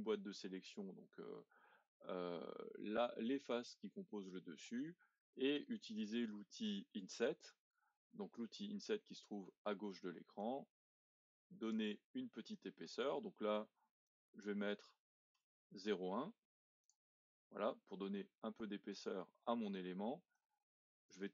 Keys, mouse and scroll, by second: 7.2-10.3 drag, 10.4 click, 12.8-16.0 drag, 18.9 click, 20.4 click.